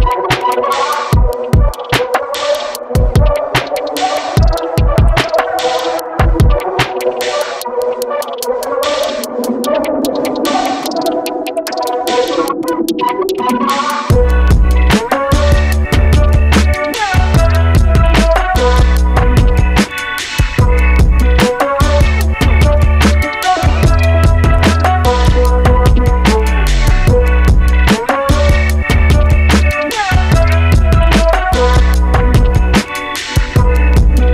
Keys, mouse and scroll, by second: 7.7-10.8 middle drag, 12.1-18.6 middle drag, 18.6 click, 20.8 x, 23.2 click, 23.6 x, 25.2-28.7 middle drag.